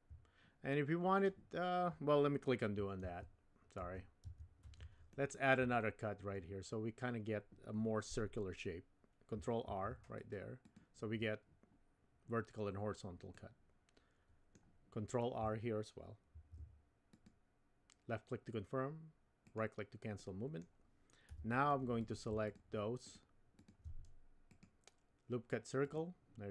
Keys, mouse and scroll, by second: 0.7 middle click, 3.0 super+z, 3.8 super+z, 4.3 super+z, 5.1 shift+middle click, 9.6 ctrl+r, 13.4-14.5 middle drag, 13.7 typing, 16.3 ctrl+r, 20.3 click, 21.3 3, 22.4 shift+click, 23.6 shift+click, 24.5-25.9 right drag.